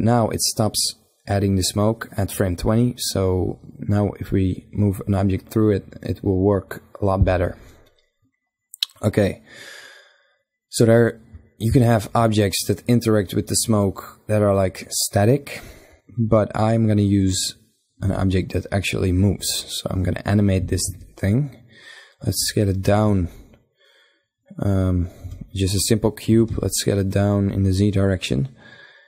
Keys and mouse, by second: 11.2 shift+a, 17.6 s, 20.1 s, 22.4 s, 24.5 z, 25.9 s, 27.5-29.0 drag.